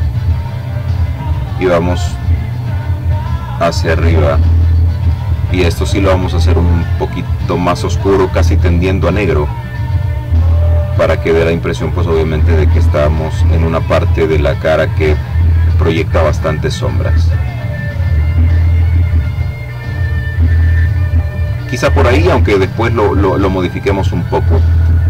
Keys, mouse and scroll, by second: 0.4-2.1 drag, 2.6 click, 3.8-6.3 drag, 8.6 click, 10.9-12.1 drag, 15.0-18.9 drag, 21.2 click, 23.5 click.